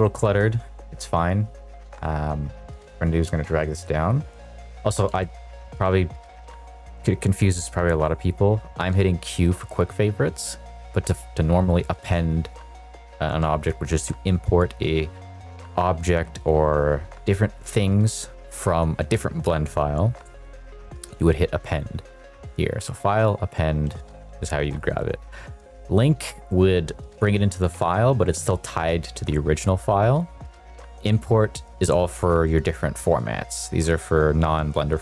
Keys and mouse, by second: 2.9-4.0 drag, 5.0 q, 10.6-34.7 drag.